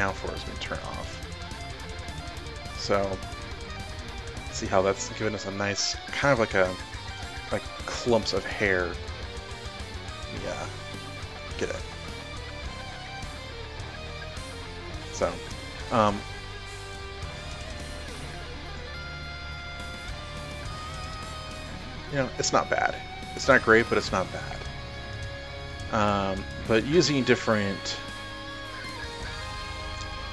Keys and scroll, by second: 9.2 ctrl+alt+z, 9.8 ctrl+alt+z, 15.5 ctrl+alt+z, 22.2 ctrl+alt+z.